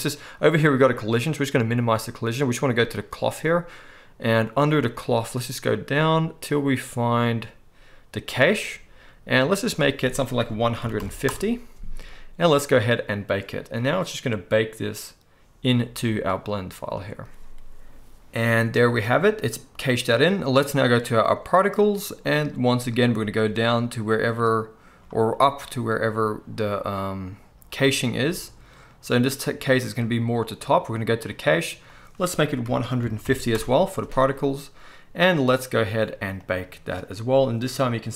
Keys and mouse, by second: 21.4-30.8 right drag.